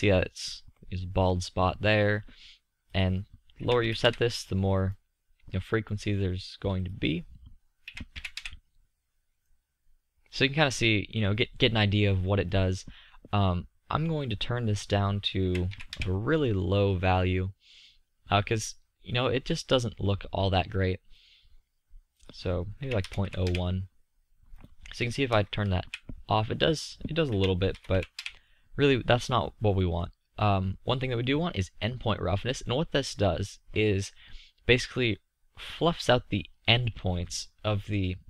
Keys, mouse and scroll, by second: 5.0 middle drag, 6.3-9.0 middle drag, 9.8-11.5 middle drag, 11.7-14.5 middle drag, 16.6-19.3 middle drag, 19.7-22.4 middle drag, 26.7 middle click, 26.7 scroll down 1, 28.8 middle click, 28.8-29.6 scroll down 1, 34.7-38.2 middle drag.